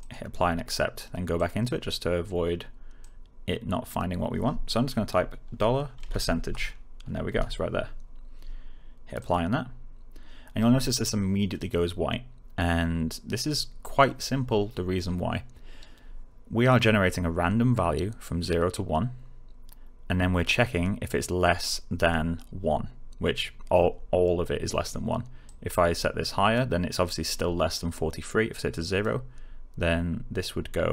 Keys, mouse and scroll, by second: 5.1 shift+click, 5.2-6.9 typing, 7.2 Return, 9.1 click, 25.4-26.7 click.